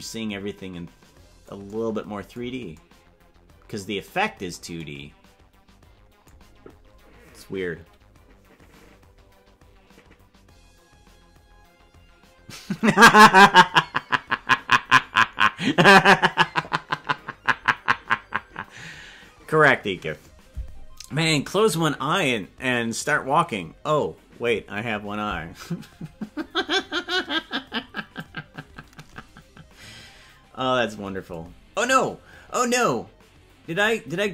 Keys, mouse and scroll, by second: 27.2-28.3 drag.